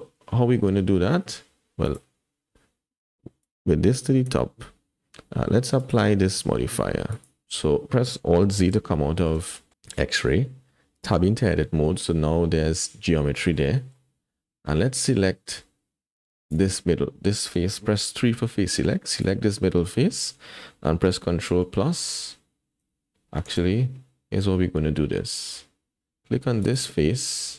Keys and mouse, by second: 1.9 click, 3.4-4.3 drag, 5.8-7.2 drag, 8.7 alt+z, 9.1 click, 9.5 shift+click, 11.0 Tab, 11.9 click, 13.3 shift+click, 13.8 click, 14.3 click, 16.5 click, 18.1 3, 19.1 click, 21.6 ctrl+KP_Add, 22.2 ctrl+KP_Add, 23.6 alt+a, 26.6 click.